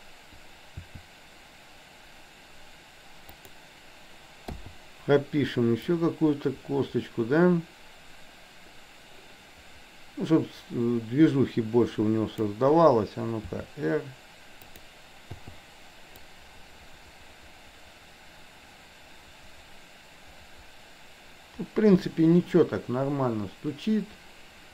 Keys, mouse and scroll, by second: 0.7 r, 4.6 i, 5.9-12.7 drag, 13.4 r, 15.4 i, 16.3-24.7 drag.